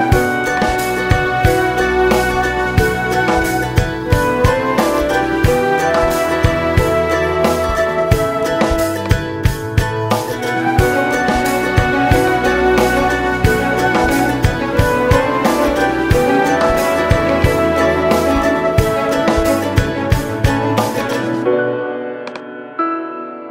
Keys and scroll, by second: 6.0 shift+space.